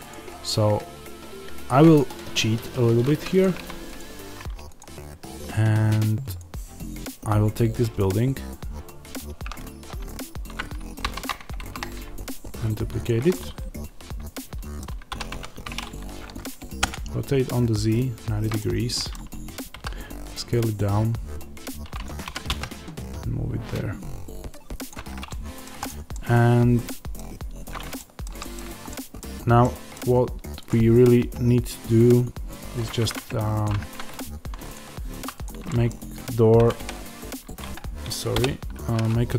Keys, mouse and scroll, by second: 0.0-3.9 middle drag, 0.0-3.3 scroll down 1, 3.3 x, 3.9 click, 10.9 shift+d, 13.0 click, 13.2-15.0 middle drag, 15.0 r, 18.5-19.7 middle drag, 19.7 s, 22.0 click, 22.2 g, 24.8 click, 25.3 middle click, 25.7 click, 26.1-30.6 middle drag, 27.4-27.9 scroll up 1, 29.2-29.5 scroll down 2, 33.0 middle click, 33.6 click, 33.7 Tab, 34.1-35.1 scroll up 2, 35.1 3, 35.3 click, 35.6-39.3 middle drag, 36.5 g, 37.7 Escape, 38.2 o.